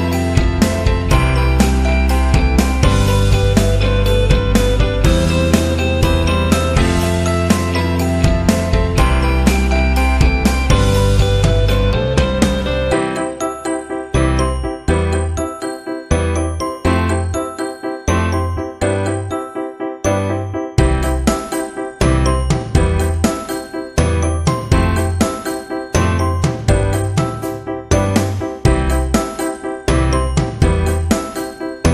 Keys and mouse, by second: 0.5 right click, 0.8 x, 3.8 ctrl+z, 4.4 middle click, 5.8 ctrl+l, 6.2 x, 8.4 KP_3, 9.0 KP_1, 9.7 click, 10.0 shift+a, 12.4 right click, 12.8 x, 14.4 right click, 15.5 ctrl+l, 16.4 g, 19.0 s, 20.7 KP_3, 21.4 g, 22.7 s, 23.2 KP_1, 23.9 shift+middle click, 24.6 s, 26.0 shift+middle click, 26.6 g, 28.9 KP_3, 29.4 shift+middle click, 30.1 alt+z, 30.6 s, 31.7 s.